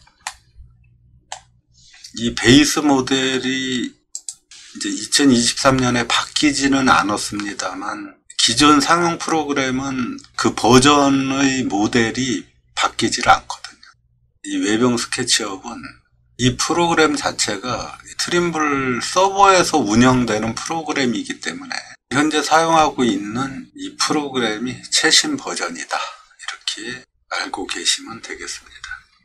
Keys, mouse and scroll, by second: 0.4-1.4 shift+middle drag.